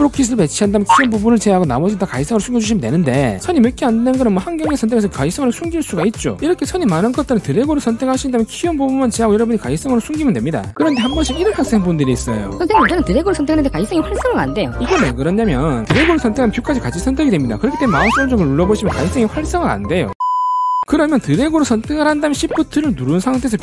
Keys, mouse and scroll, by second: 4.6 right click, 5.3 v, 5.9 right click, 6.3 v, 7.6-8.5 drag, 9.9 shift+click, 10.7 shift+click, 13.2-13.7 drag, 14.1 right click, 16.0-16.7 drag, 19.0 right click, 21.7 drag, 22.0-22.5 right drag, 22.5 click.